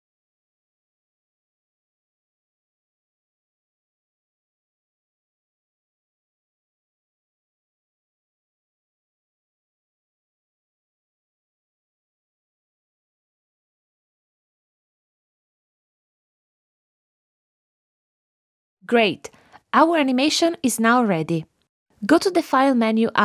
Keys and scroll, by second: 3.0 super+c, 4.1 super+v, 7.9 super+c, 9.1 super+v.